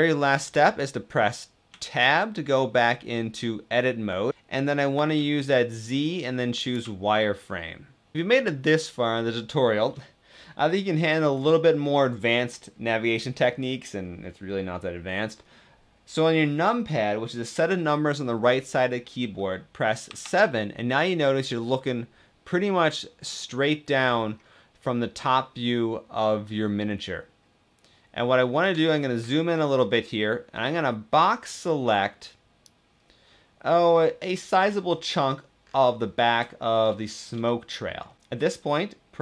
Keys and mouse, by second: 1.6 Tab, 4.9 z, 19.8 KP_7, 23.7 shift+middle click, 28.7 shift+click, 30.4 b, 37.3 shift+middle click, 38.2 g.